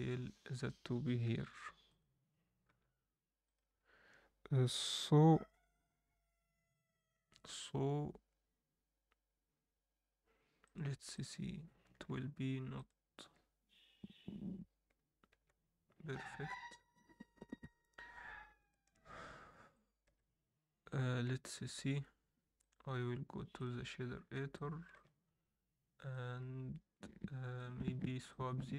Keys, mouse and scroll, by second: 10.6-11.4 drag, 11.9-13.8 scroll up 1, 13.8 click, 15.3 Tab, 19.7 shift+click.